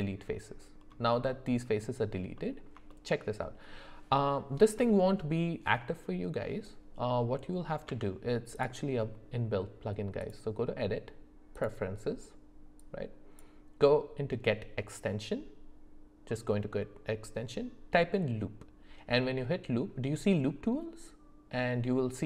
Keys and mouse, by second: 1.3 middle click, 2.3 middle click, 2.9 shift+middle click, 7.9 Tab, 10.2-11.7 drag.